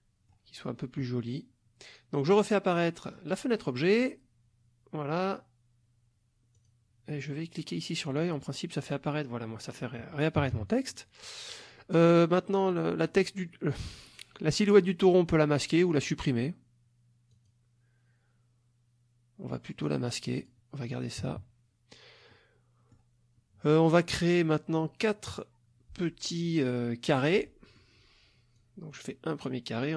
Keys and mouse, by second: 2.3 click, 3.1 click, 6.6 click, 8.1 click, 10.4 KP_Subtract, 11.2 middle click, 12.6 click, 15.9 click, 17.3 click, 19.8 click, 20.4 click, 21.2 KP_Subtract, 22.3 middle click, 27.1 click, 27.5 middle click, 28.5-29.9 drag.